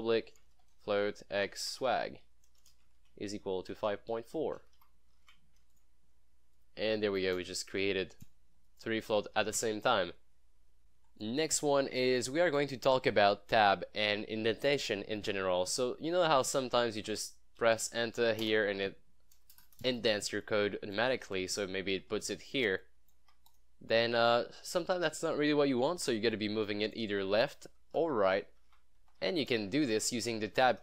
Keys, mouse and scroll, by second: 0.0-2.6 typing, 4.5-5.4 typing, 5.8 click, 7.4 BackSpace, 8.1 BackSpace, 8.7 Return, 8.7 click, 9.2 ctrl+s, 10.0 scroll down 1, 10.2 scroll up 1, 11.1 scroll up 1, 12.2 click, 17.0 click, 17.8 BackSpace, 18.1 shift+[, 18.5 Return, 19.6 BackSpace, 22.9 click, 23.3 Tab, 23.6 click, 26.4-27.0 click, 27.4 shift+Tab, 28.5 Tab, 29.3 Tab, 30.0 shift+Tab.